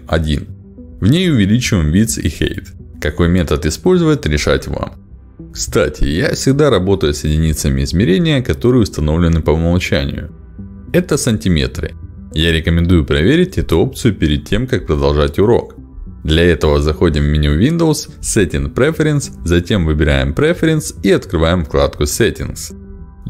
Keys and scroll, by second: 2.7 2, 2.8 0, 3.1 Return, 5.1 Return.